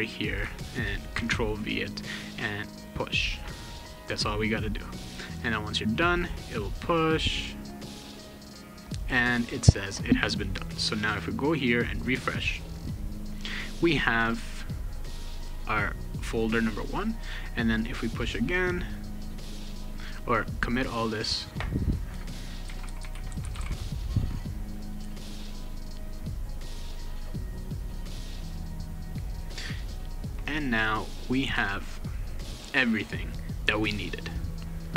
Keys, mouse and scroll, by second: 0.0 click, 1.1 ctrl+v, 2.8 click, 8.4 click, 10.6 click, 11.9 click, 17.2 click, 19.6 click, 20.5 click, 21.2 click, 22.4-24.0 typing, 25.6 click, 26.7 click, 30.3 click, 31.4 click.